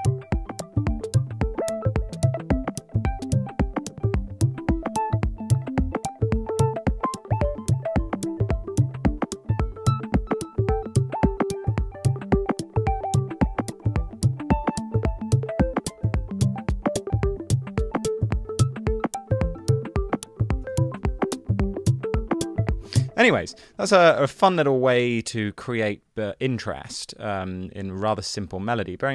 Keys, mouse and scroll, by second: 21.0 super+z, 23.2 space.